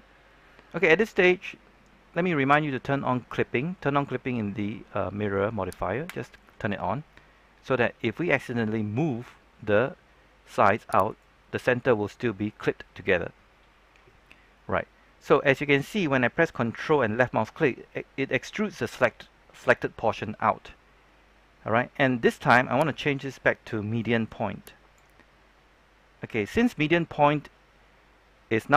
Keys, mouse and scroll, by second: 6.0 click, 8.9 g, 11.0 right click, 22.9-25.7 drag.